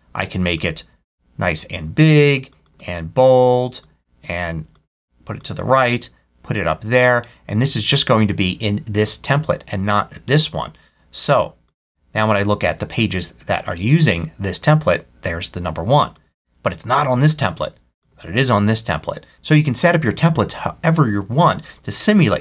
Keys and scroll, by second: 0.2 super+a.